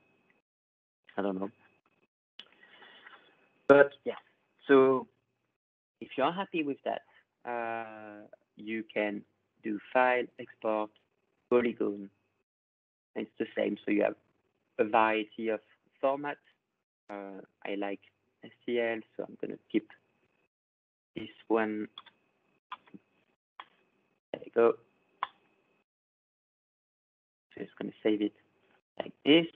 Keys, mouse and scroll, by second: 0.4 click, 1.1 click, 2.1 click, 2.7 ctrl+scroll, 4.1 click, 5.1 click, 8.7 click, 9.0 click, 11.7 click, 13.6 click, 17.7 click, 19.2 click, 20.2 click, 20.7 click, 21.4 click, 23.6 click, 25.4 click, 28.5 click.